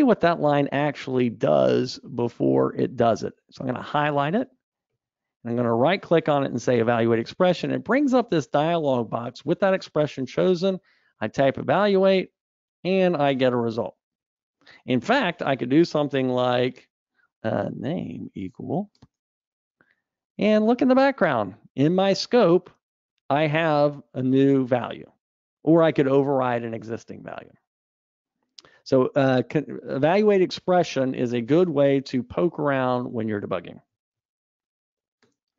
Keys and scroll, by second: 7.0 alt+F8, 29.2 super+F2, 34.2 super+Up.